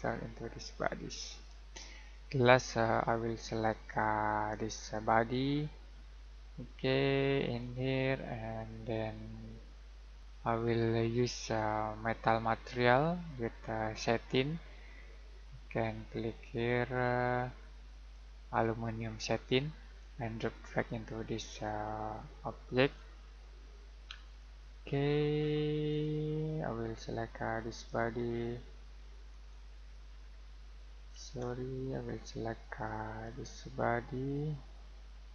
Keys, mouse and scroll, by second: 4.7 click, 7.6 click, 12.6 click, 25.4-25.8 scroll down 1, 25.8-27.7 scroll up 1, 27.7 click, 31.2 Escape.